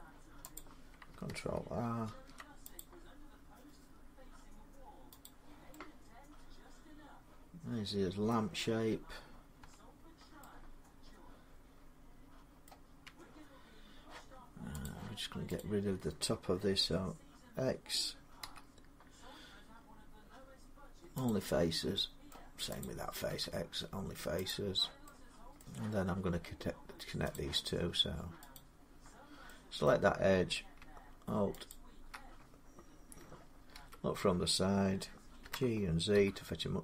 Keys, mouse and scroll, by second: 0.4 click, 1.9 ctrl+r, 2.6 click, 5.0 click, 8.1 middle click, 9.4 Tab, 9.8-10.4 scroll up 4, 12.4 middle click, 12.8 Tab, 12.8 scroll, 14.6 click, 15.4 click, 18.2 x, 21.1 click, 22.1 middle click, 22.6 click, 23.1 x, 24.3 click, 25.4 middle click, 27.1 click, 28.3 click, 29.7 middle click, 31.5 alt+click, 33.6 1, 35.2-35.9 typing.